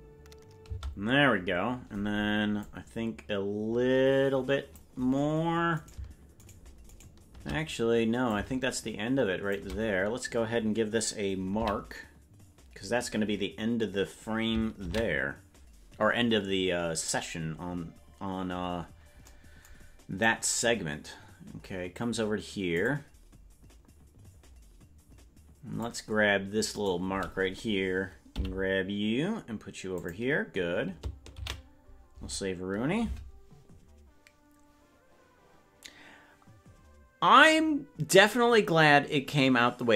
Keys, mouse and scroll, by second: 0.7 space, 2.6-4.8 drag, 5.8 right click, 6.4-7.6 shift+right drag, 8.2-9.6 drag, 11.5 m, 18.3 ctrl+s, 18.3-19.2 scroll down 7, 19.2-19.8 scroll down 1, 20.3-25.9 drag, 26.7-28.2 right drag, 28.2 g.